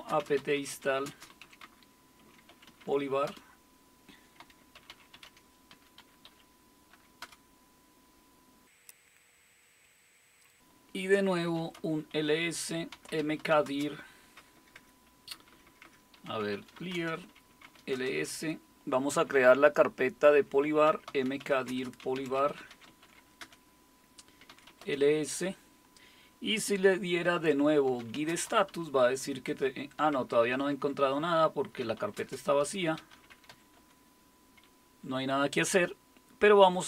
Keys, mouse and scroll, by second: 0.0-7.7 typing, 8.9 Return, 11.2-18.1 typing, 20.6-25.2 typing, 27.7-34.0 typing.